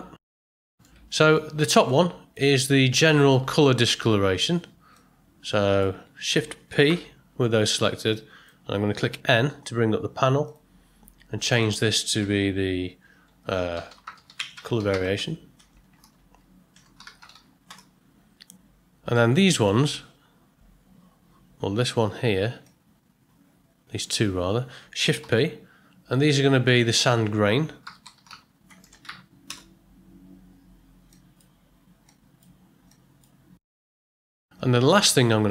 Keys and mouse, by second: 0.2 middle click, 0.6 ctrl+middle click, 1.1 middle click, 1.9 click, 4.9 click, 6.8 shift+p, 8.1 click, 9.3 n, 10.4 click, 11.5-18.2 drag, 15.7 BackSpace, 19.1 middle click, 19.6 middle click, 22.6-24.0 drag, 25.2 shift+p, 26.6-30.1 drag, 28.8 BackSpace, 31.1 click, 32.0 click, 32.9 click, 33.6 middle click, 34.1 ctrl+middle click.